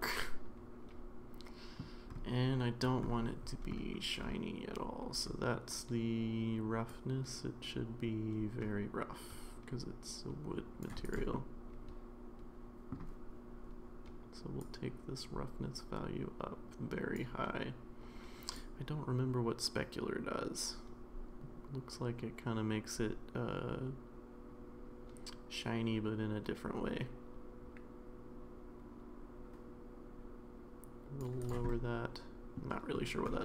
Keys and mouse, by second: 6.9-10.8 drag, 11.1 click, 11.3-12.9 middle drag, 14.7-17.2 drag, 18.5-31.2 drag, 31.4 click, 31.7-32.6 middle drag.